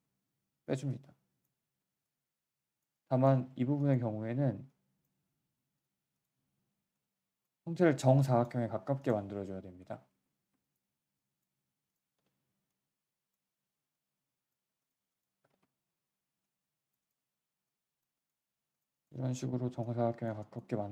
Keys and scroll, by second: 6.4 r, 7.5 w, 9.8 z, 10.1 z, 12.1 r, 13.4 w, 13.5 w, 15.4 r, 17.2 w, 17.3 w, 19.4 r.